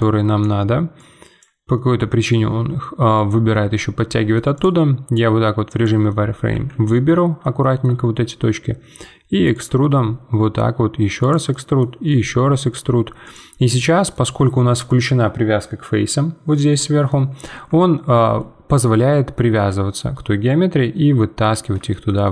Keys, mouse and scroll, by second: 6.1 middle click, 6.5 z, 6.9-8.0 middle drag, 8.0 e, 9.9 e, 11.5 middle click, 11.9 e, 13.5-16.5 middle drag, 17.1 middle click, 17.5 Tab, 18.3-21.4 middle drag, 21.9 shift+middle click.